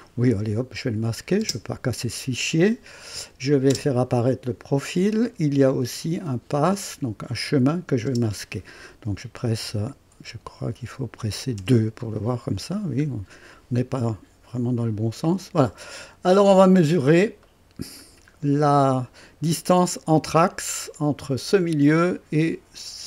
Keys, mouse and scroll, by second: 1.4 click, 1.4 space, 3.1 click, 3.7 typing, 5.1 click, 7.3 click, 8.1 typing, 9.6 typing, 11.6 typing, 12.1-12.9 right drag, 13.0 typing, 13.0 scroll up 1, 13.6 scroll down 1, 14.0-15.9 right drag, 16.1-16.5 scroll up 1, 16.8 scroll down 1, 17.4-18.2 right drag, 18.4 scroll down 1, 19.0 right click.